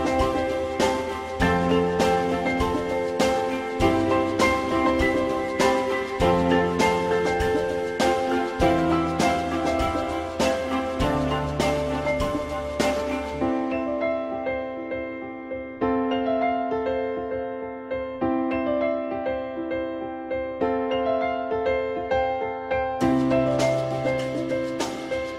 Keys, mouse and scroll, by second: 8.9 ctrl+z, 10.2 alt+middle click, 12.6 click, 15.3 click, 19.7 alt+middle click, 21.3 alt+middle click, 23.3 alt+middle click.